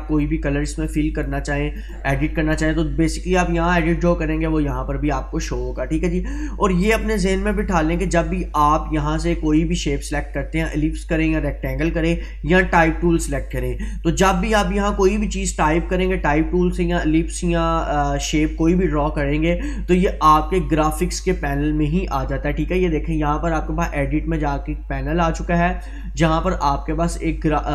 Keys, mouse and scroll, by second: 9.6-12.2 drag.